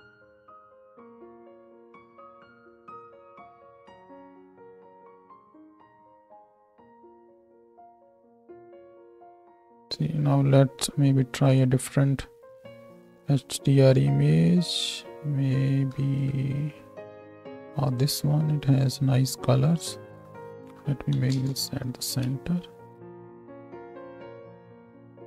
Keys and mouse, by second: 0.2 shift+click, 0.2 shift+z, 0.3 middle click, 0.4 shift+click, 0.5 middle click, 1.0-5.4 drag, 5.4-11.7 shift+middle drag, 7.2 space, 7.5 space, 8.0 space, 8.2 space, 9.8 space, 11.7-25.2 drag, 22.3 space, 23.6 space.